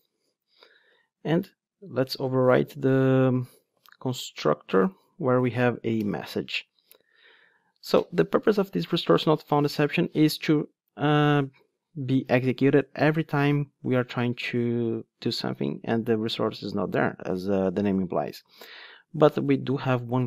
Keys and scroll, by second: 0.8 Tab, 2.2 super+o, 3.7 super+n, 4.8 Down, 5.4 Up.